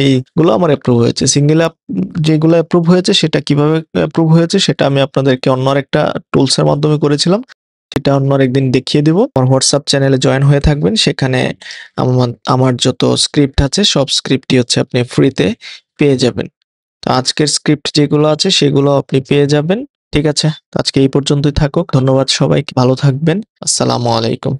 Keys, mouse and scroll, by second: 7.2 ⟲.